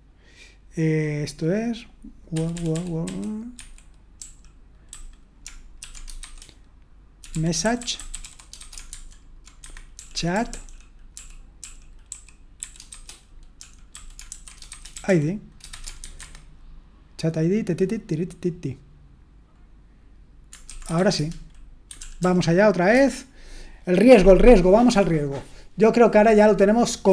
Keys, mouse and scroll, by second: 2.9-16.0 typing, 9.6 Escape, 16.2 Escape, 20.9-21.6 typing, 22.0 ctrl+p, 22.2 ctrl+p, 22.9 Return.